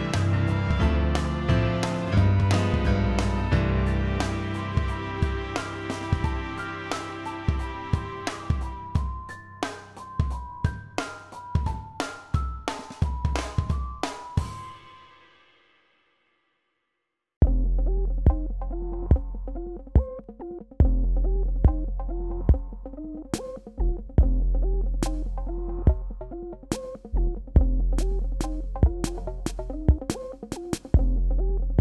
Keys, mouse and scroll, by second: 6.8 click, 12.6 click, 13.2-13.5 scroll down 2, 13.5 shift+click, 13.8 click, 16.4 click, 17.3 click, 18.0 space, 18.0 click, 18.4 alt+scroll up 1, 18.6-22.0 drag, 27.6 click, 28.4 alt+scroll down 1, 30.0 alt+scroll up 1, 30.6 click.